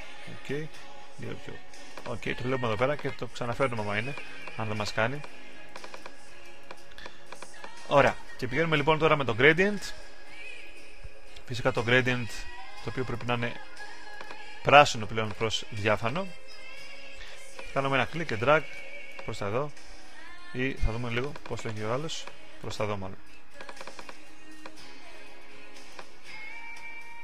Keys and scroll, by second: 20.5 super+z.